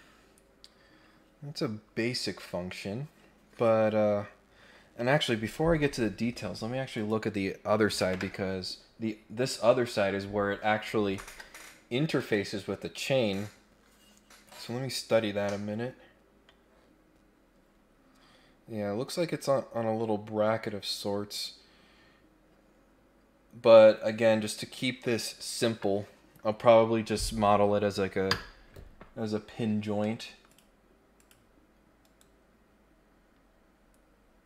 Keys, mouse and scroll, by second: 6.9 click, 29.2 scroll down 1, 29.4-29.9 scroll up 2, 30.0 middle click, 30.4 click, 31.1 click, 32.7-33.3 scroll up 3, 33.3 scroll down 2, 33.7-34.3 scroll up 4.